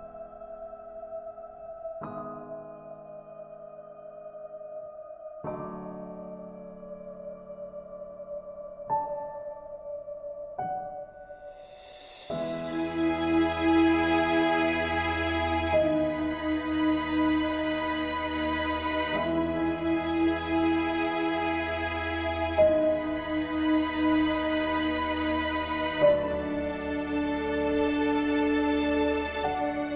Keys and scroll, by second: 19.5 ctrl+g, 20.3 ctrl+a, 25.3 ctrl+d, 28.9 ctrl+alt+s.